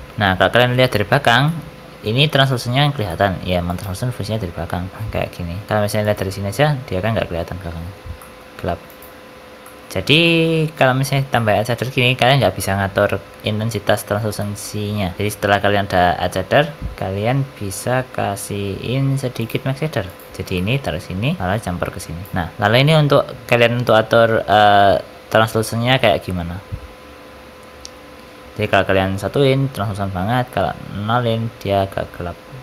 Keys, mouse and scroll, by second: 0.1 middle click, 1.4 middle click, 2.6-3.0 scroll down 4, 3.0 middle click, 3.7 ctrl+shift+click, 4.9 middle click, 5.6 middle click, 6.0 ctrl+shift+click, 8.1 middle click, 8.9 ctrl+shift+click, 9.6 middle click, 10.2 middle click, 11.0-11.7 scroll up 5, 11.3 middle click, 14.3 middle click, 15.1 shift+a, 16.3 shift+a, 20.4 middle click, 21.4 click, 22.3 middle click, 22.5-23.1 scroll up 3, 23.8 click.